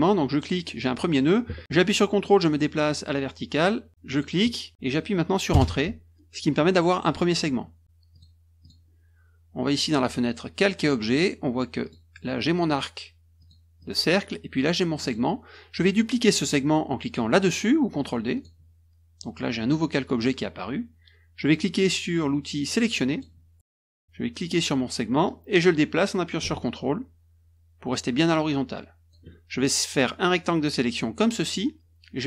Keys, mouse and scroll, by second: 0.3 click, 4.1 ctrl+click, 5.5 Return, 8.1 click, 8.6 click, 9.7 click, 11.8 click, 13.4 click, 13.8 click, 15.0 click, 18.3 click, 23.1 click, 25.2-29.1 drag, 30.3-31.5 drag.